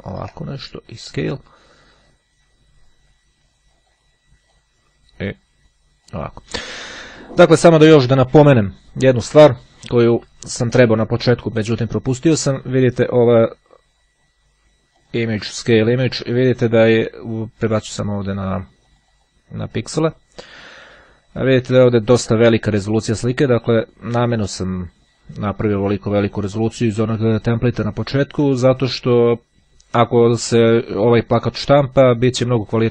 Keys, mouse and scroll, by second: 1.2 click, 4.0 click, 4.6-6.5 drag, 15.1 click, 15.9 click, 18.0 click, 18.7 click, 20.1 click, 21.4 click, 22.1 click, 23.5 click.